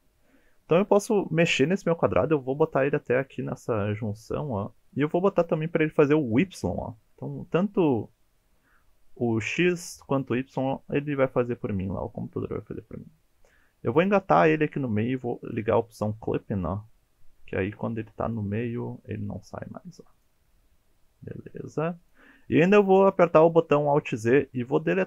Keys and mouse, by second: 4.9 click, 6.4 click, 8.3 g, 14.0 click, 15.5 click, 16.2 g, 18.2 click, 18.6 g, 20.1 click, 20.5 g, 22.0 click, 22.4 middle click, 23.3 alt+z, 23.8-24.1 middle drag, 24.7-25.0 middle drag.